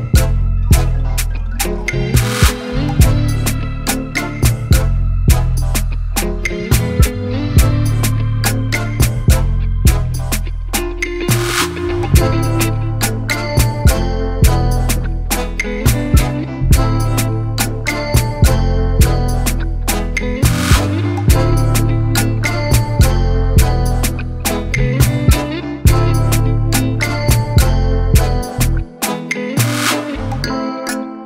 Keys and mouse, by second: 1.2 click, 3.0 click, 4.3 right click, 6.2 click, 6.9 click, 7.4 right click, 9.2 click, 11.0 click, 11.4 right click, 13.0 click, 14.6 click, 15.1 click, 15.3 right click, 16.8 click, 17.2 click, 18.9 shift+click, 20.4 click, 20.9 shift+l, 21.9 click, 22.5-24.2 typing, 25.2 click.